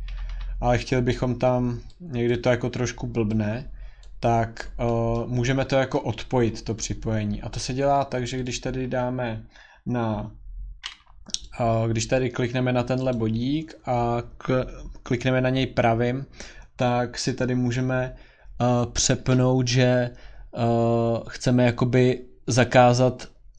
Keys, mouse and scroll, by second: 0.1 Escape, 0.3 Escape, 0.9 click, 2.3 click, 4.0 click, 4.3-5.0 scroll, 5.2 scroll, 5.2 scroll down 1, 5.4-6.4 scroll down 10, 6.7 Escape, 6.7 scroll, 8.4 click, 9.6 scroll down 10, 11.5 click, 13.1 right click.